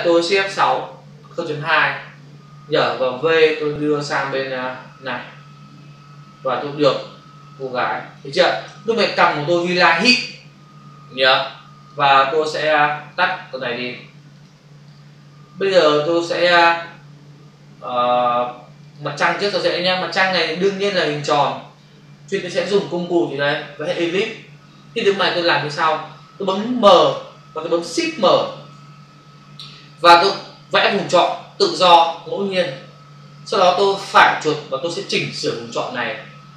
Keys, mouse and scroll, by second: 0.6 shift+F6, 1.5 Return, 3.2 v, 3.9 click, 7.6 click, 8.8 ctrl+click, 8.9 ctrl+space, 9.6 ctrl+space, 11.9 click, 13.0 click, 14.4 click, 15.8 click, 18.8 click, 20.1 ctrl+space, 20.2 ctrl+click, 20.3 ctrl+space, 21.1 space, 30.9 click.